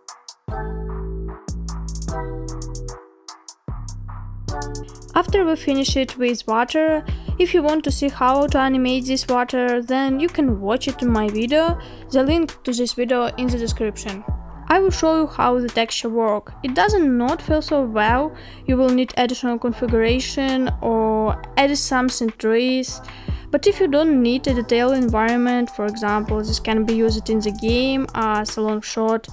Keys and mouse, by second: 1.2-1.7 middle drag, 2.1 g, 9.0 shift+middle drag, 9.2-10.1 middle drag, 10.5 middle click, 12.5 middle click, 13.7 click, 19.4 click, 21.0 shift+middle click, 28.2-29.3 drag.